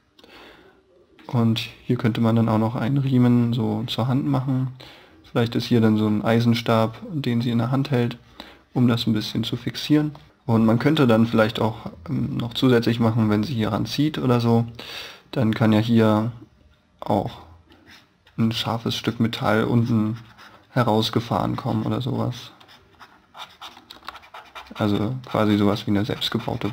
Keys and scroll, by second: 23.9 e.